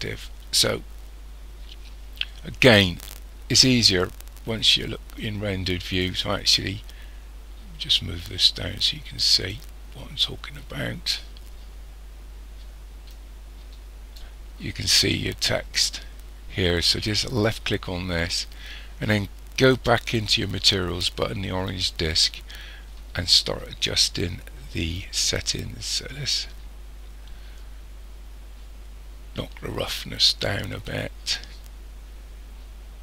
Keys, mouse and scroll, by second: 5.2 click, 8.9 click, 13.1 click, 17.3 click, 21.7 click, 24.9 click.